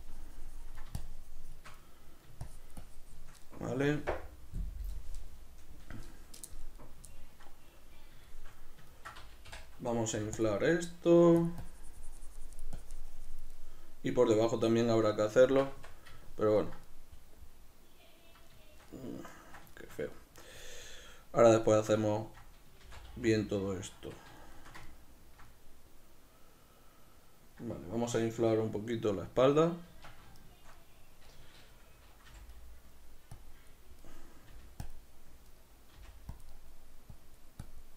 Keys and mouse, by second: 0.1-1.9 ctrl+drag, 1.9 middle click, 2.5-6.8 shift+drag, 6.8-11.6 middle drag, 10.2 f, 11.2 f, 11.7-13.6 drag, 13.6-15.5 middle drag, 15.8 Tab, 16.3 ctrl+middle click, 22.9 shift+c, 24.5 shift+middle click, 29.9 Tab, 30.4 shift+middle click, 32.3-33.4 middle drag, 32.3 g, 33.4 click, 34.1 middle click, 34.5 g, 34.9 click, 35.6 middle click, 36.0 f, 36.5 click, 36.6 middle click, 37.2-37.9 drag.